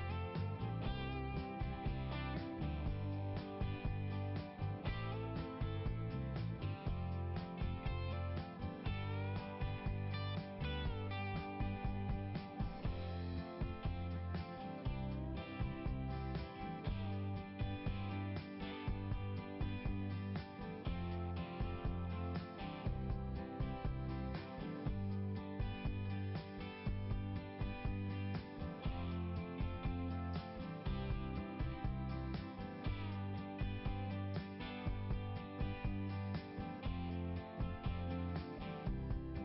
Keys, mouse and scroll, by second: 0.6 click, 3.7 click, 5.3 click, 6.2 scroll up 1, 9.7 scroll up 1, 12.0 right click, 13.3 click, 14.0 right click, 15.4 right click, 16.1 click, 16.6 click, 18.3 click, 19.6 click, 22.1 click, 23.1 click, 23.8 click, 24.5 click, 24.9 click, 27.7 click, 28.2 click, 29.7 click, 31.4 click, 33.8-34.2 scroll down 1, 34.7-35.9 scroll down 1, 38.6 click.